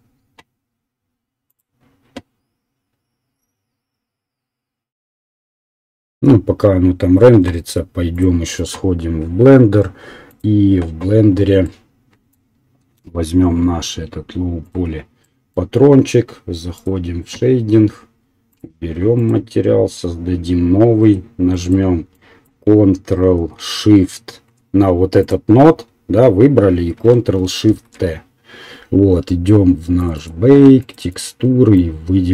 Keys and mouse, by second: 10.8 right click, 11.3-14.6 middle drag, 14.6 right click, 15.1-16.8 middle drag.